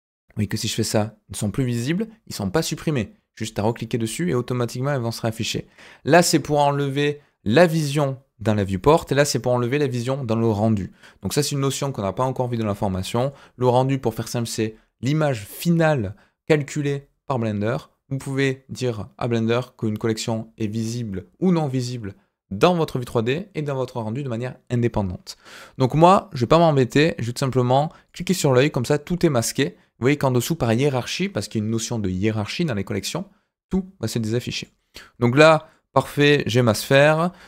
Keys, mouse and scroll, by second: 3.6 click, 7.4 click, 8.8 click, 10.5 click, 11.2 click, 28.0 click, 34.5 click, 34.8-35.7 middle drag, 36.1 middle drag, 36.6 middle click.